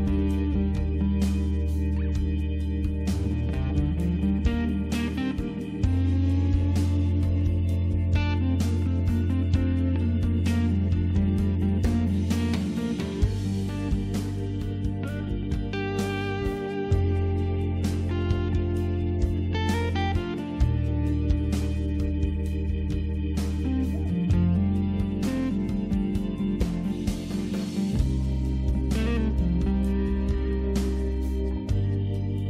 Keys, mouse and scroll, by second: 4.6 click, 9.0 click, 9.2 click, 9.8 right click, 11.2 click, 12.1 click, 14.5 click, 15.3 click, 16.5 Delete, 16.8 End, 17.1-20.2 typing, 20.4 shift+Return, 22.0 click, 24.0 click, 26.4 click, 32.1 click.